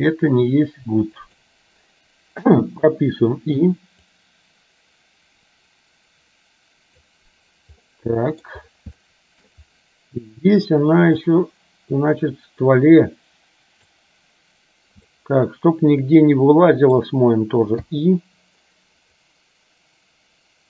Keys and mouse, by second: 0.0 r, 2.8 i, 4.3-7.3 drag, 8.0 middle click, 9.2 shift+middle click, 11.4-14.0 drag, 15.3-17.0 middle drag, 19.4-20.6 drag.